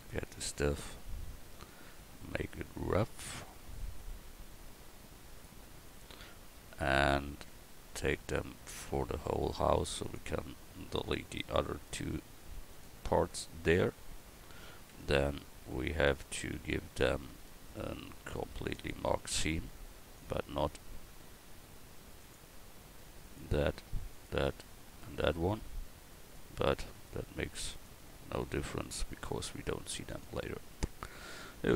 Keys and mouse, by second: 0.0-8.2 drag, 12.8-14.9 drag, 14.9 Tab, 16.5 a, 18.9-31.6 drag, 20.2-31.6 right drag, 31.6 Tab.